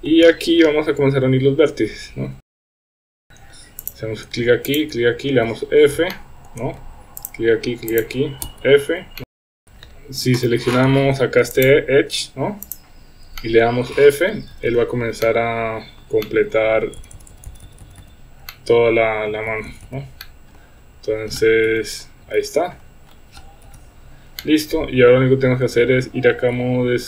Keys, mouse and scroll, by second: 2.6 click, 2.9 Tab, 3.0 shift+middle click, 3.9 drag, 5.5 f, 6.1-6.5 shift+middle drag, 7.2 shift+click, 8.0 shift+drag, 8.5 f, 9.2 middle click, 9.5 middle click, 9.6 f, 10.9 ctrl+z, 11.5 click, 13.4 middle click, 14.0-14.7 typing, 15.2-15.9 middle drag, 16.2-16.8 middle drag, 17.0-18.0 typing, 18.5-19.3 middle drag, 19.5 f, 19.7 f, 19.9 f, 20.2-20.6 middle drag, 21.7 KP_1, 23.6 KP_1, 24.4-25.2 middle drag, 25.5 Tab.